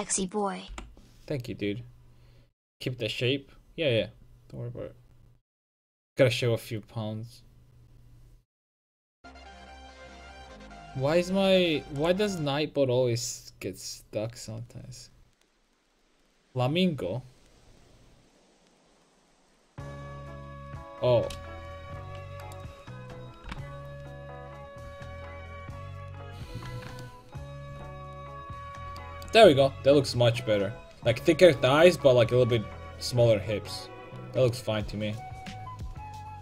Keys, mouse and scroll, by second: 22.5-26.3 right drag, 23.5 g, 26.4-28.0 drag, 26.6 a, 27.2 middle click, 27.6-28.7 middle drag, 27.6 right click.